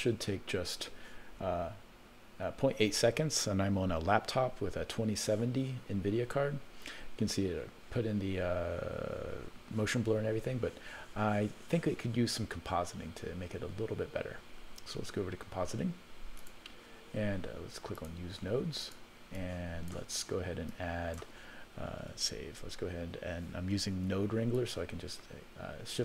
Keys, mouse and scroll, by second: 5.9-6.5 scroll down 1, 6.5-7.0 scroll up 1, 8.9-9.5 scroll up 1, 16.5 click, 17.9 click, 18.8 click, 19.3 click, 20.6 click, 22.1 ctrl+s, 24.5-26.0 shift+drag, 24.5 shift+right click.